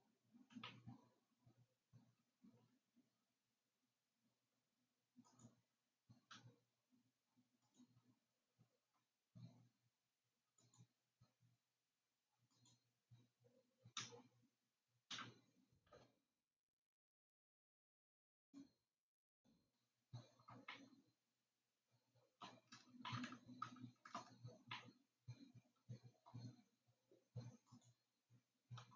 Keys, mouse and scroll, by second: 1.1-4.5 shift+middle drag, 5.8 click, 8.6 click, 12.9 click, 15.6 g, 21.1-28.0 middle drag, 28.0 click.